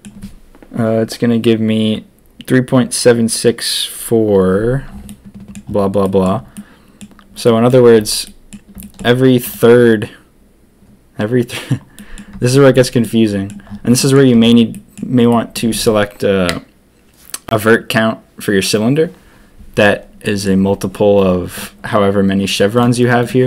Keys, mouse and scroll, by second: 5.0 click, 6.0 click, 6.5 click, 7.4 click, 7.5 middle click, 8.2 middle click, 8.8 shift+middle click, 11.9 click, 12.5 shift+click, 13.0 middle click, 13.9 middle click, 14.7 middle click, 15.3 middle click, 20.2 middle click.